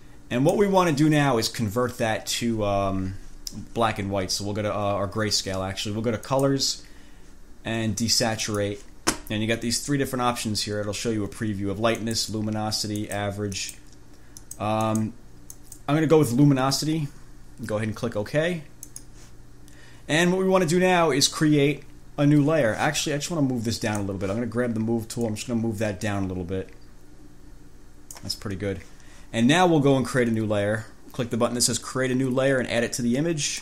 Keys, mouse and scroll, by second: 6.5 click, 8.7 click, 12.2 click, 13.2 click, 13.8 click, 14.6 click, 15.1 click, 15.7 click, 19.0 click, 24.0 click, 25.4-28.6 drag.